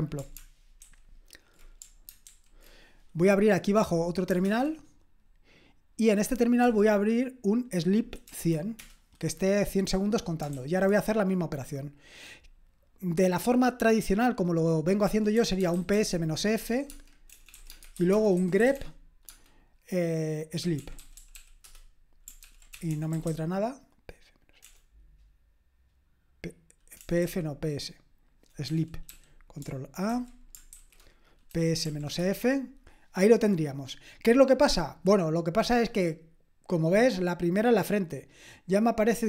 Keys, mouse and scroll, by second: 0.1-0.8 scroll down 1, 0.8 ctrl+alt+j, 2.2 ctrl+super+j, 4.4 super+Return, 8.7 Return, 10.5 super+k, 15.1-19.2 typing, 20.5-24.6 typing, 22.4 ctrl+p, 27.0 BackSpace, 27.2 f, 28.6 BackSpace, 29.0 p, 30.1 ctrl+a, 30.7 alt+d, 31.8-32.2 typing.